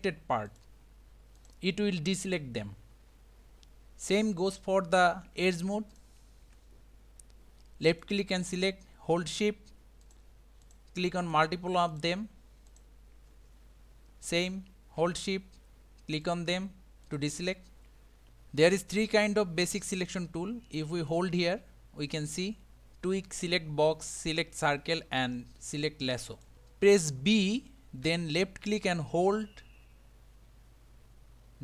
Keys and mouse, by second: 0.5 shift+click, 1.4 shift+click, 2.3 shift+click, 5.9 click, 6.4 2, 7.9 click, 10.0 shift+click, 10.6 shift+click, 11.2 shift+click, 11.9 shift+click, 12.7 shift+click, 16.2 shift+click, 17.1 shift+click, 18.8-20.1 middle drag, 21.2 click, 28.0 b.